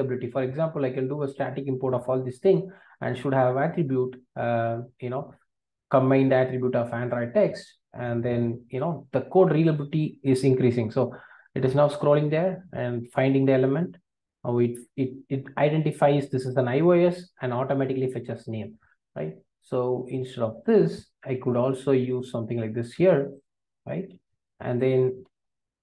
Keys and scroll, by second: 0.2 alt+Return, 21.3 super+x, 22.5 super+v, 24.1 super+BackSpace, 25.2 alt+Return.